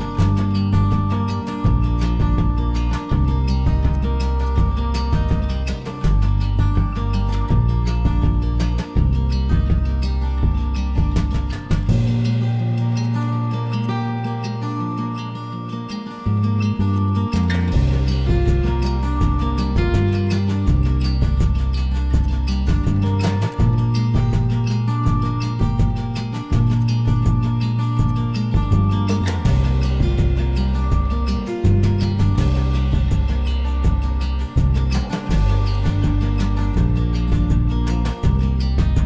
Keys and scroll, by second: 8.6 Delete, 13.6-15.5 typing, 17.4 Delete, 21.5 l, 24.3 Escape, 28.5 e, 31.3 p, 33.8 Escape, 34.1-36.7 typing, 36.8 Return.